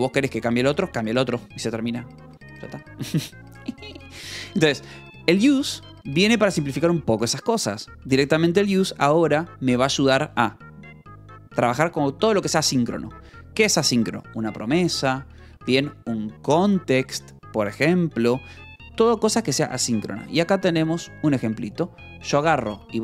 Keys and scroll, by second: 10.0 j, 10.8 shift+v, 16.1 Escape, 18.7 j, 20.6 shift+v, 22.6 Escape, 22.8 h.